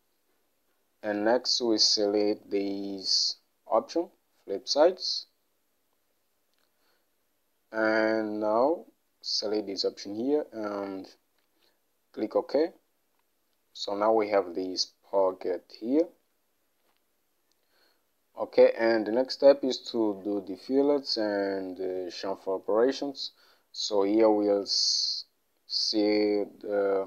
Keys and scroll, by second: 20.8 Home.